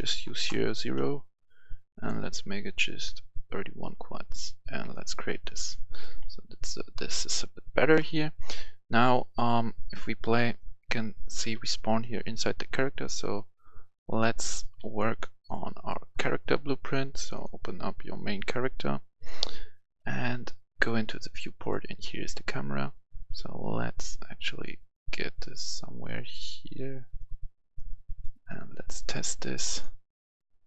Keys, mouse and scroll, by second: 0.3 Return, 1.9 click, 6.0-8.1 right drag, 6.5-8.2 typing, 9.2 click, 10.3 right click, 11.1 right click, 12.6 Escape, 14.3-29.6 drag.